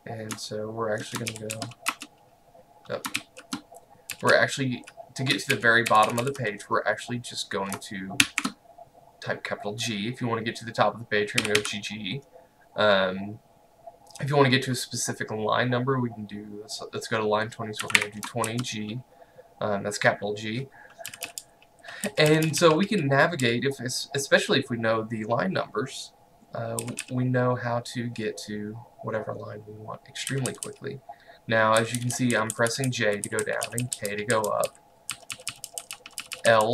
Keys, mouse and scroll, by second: 1.3-2.1 typing, 3.2-4.9 typing, 5.6 ctrl+u, 6.1 u, 6.3 u, 8.3 shift+g, 11.5 g, 11.7 g, 13.8 typing, 17.6-19.0 typing, 21.1-23.5 typing, 26.9 typing, 30.4-36.7 typing.